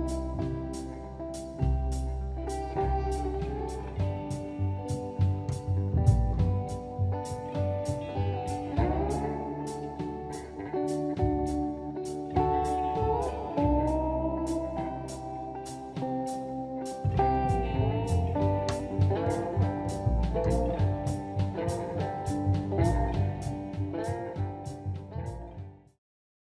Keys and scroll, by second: 6.5 shift+space, 9.7 m, 14.8 space.